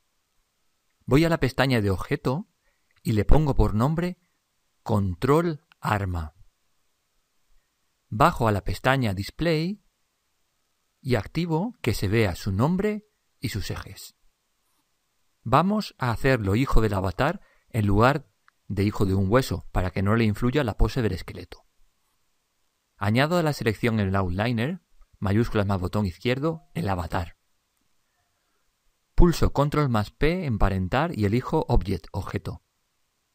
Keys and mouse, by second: 1.5-3.9 drag, 9.1 click, 26.1 click, 29.9 ctrl+p.